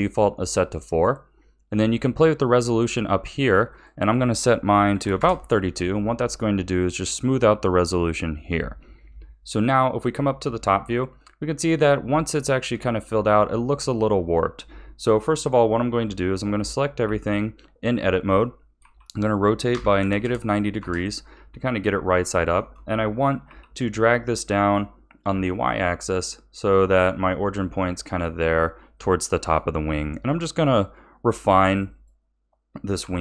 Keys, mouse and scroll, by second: 0.8-2.3 scroll up 1, 2.3-6.7 drag, 9.4 KP_7, 10.0-10.4 scroll down 5, 12.3-13.0 shift+middle drag, 13.0-13.8 scroll up 2, 13.8 click, 15.5 Tab, 16.5 a, 17.0 a, 18.8 r, 22.2-23.4 shift+middle drag, 23.4 g, 28.9 shift+middle click, 29.8 click, 30.5 r, 31.9 click, 33.0 r.